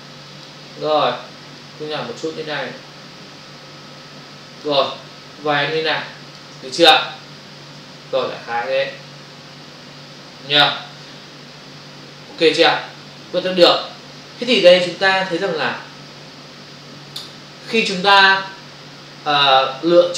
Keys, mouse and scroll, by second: 1.5 shift+click, 5.7 click, 7.3 Return, 7.8 ctrl+o.